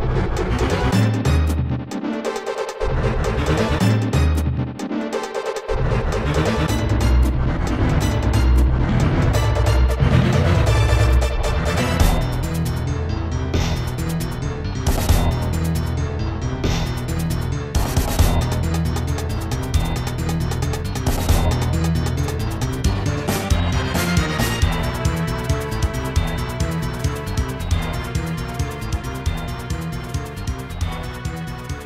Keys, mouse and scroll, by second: 1.6 shift+right click, 2.2 shift+right click, 2.6 shift+right click, 3.3 shift+right click, 3.7 right click, 5.2 1, 7.2-7.8 typing, 10.2-10.7 typing, 11.9 right click, 13.5-16.2 typing, 17.3 ctrl+s, 17.6 click, 20.6 typing, 21.4 Return, 25.3 click, 27.4 click, 30.8 click, 31.2 ctrl+z.